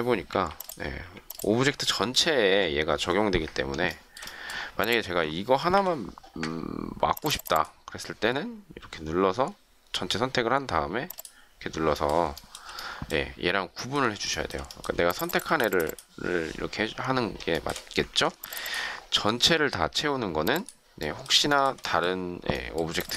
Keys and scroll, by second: 0.3 Delete, 1.0 Delete, 5.5 Delete, 14.9 shift+space, 18.0 ctrl+shift+z.